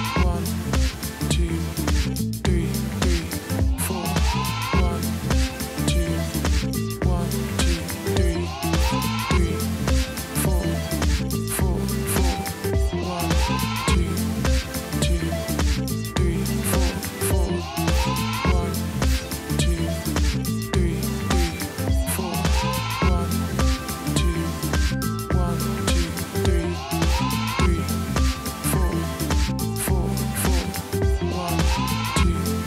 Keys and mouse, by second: 2.3 right click, 4.1 click, 6.9 click, 7.9-9.2 typing, 9.9 click, 11.8 Return, 14.6 click, 15.0 click, 16.7 click, 17.8 click, 18.8 click, 20.0 click, 22.6 click, 23.5 alt+BackSpace, 24.1 v, 25.0 click, 26.3 click, 28.2 click, 29.3 alt+BackSpace, 30.4 v, 31.7 click.